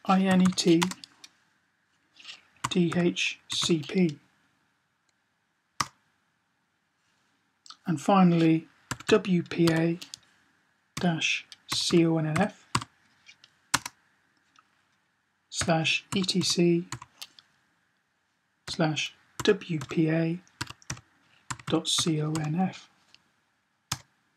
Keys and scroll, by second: 0.0-0.4 typing, 2.3-3.5 typing, 8.8-9.4 typing, 10.7-12.7 typing, 15.5-16.7 typing, 18.4-22.1 typing.